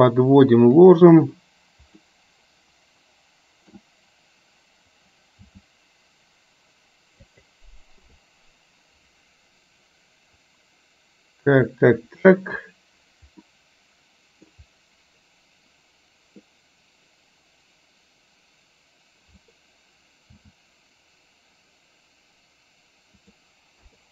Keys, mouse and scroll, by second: 2.1-3.8 middle drag, 5.6 g, 8.1 KP_0, 11.8 middle click, 13.4-14.6 middle drag, 20.3 s, 23.8 KP_0.